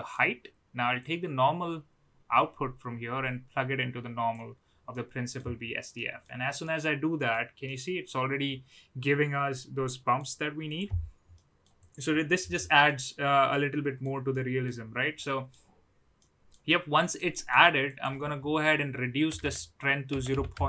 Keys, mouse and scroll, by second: 0.9-4.4 drag, 4.9-5.3 middle drag, 5.9-6.2 middle drag, 6.6-7.3 middle drag, 7.6-10.2 middle drag, 11.3-11.6 middle drag, 12.5-12.8 middle drag, 13.5-14.0 middle drag, 14.3-14.7 middle drag, 15.2-15.5 middle drag, 16.3 middle click, 17.2 middle click, 17.8-20.6 drag.